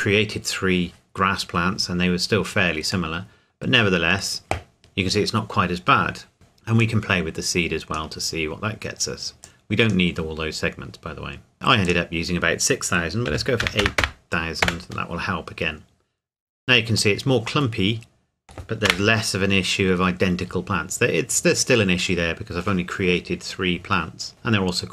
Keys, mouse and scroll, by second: 3.1 middle click, 6.8 click, 13.3 KP_8, 13.6 KP_0, 14.6 KP_Enter, 17.1 middle click, 18.9 KP_0, 20.7 scroll up 1.